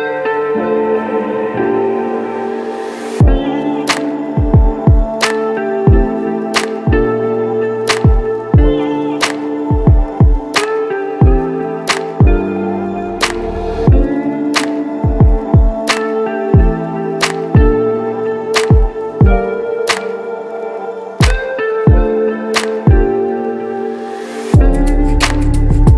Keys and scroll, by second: 8.4 x, 10.5 x, 10.9 [, 13.7 x, 14.2 b, 14.6 x, 20.8 ctrl+s, 23.1 ctrl+0.